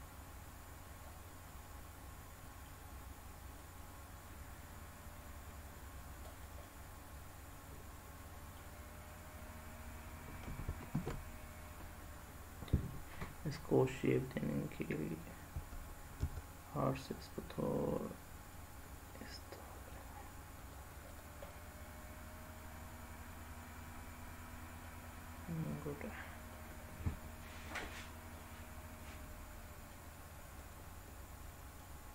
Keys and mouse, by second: 1.5-2.7 middle drag, 3.5-5.9 drag, 6.3 click, 6.6-8.5 middle drag, 10.9 ctrl+z, 15.5 r, 16.2 r, 20.6 drag, 21.1 click, 21.5-24.8 middle drag, 25.5-26.5 middle drag, 28.3-29.9 middle drag, 30.4 click, 31.8-32.1 middle drag.